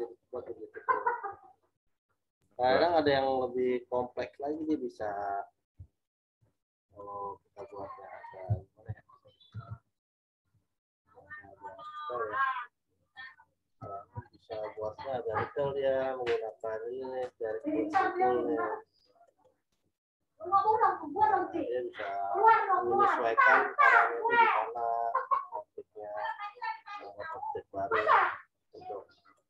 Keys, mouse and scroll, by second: 2.8 click, 8.6 ctrl+z, 10.5 shift+click, 14.6 shift+click, 16.6 right click, 17.5 click.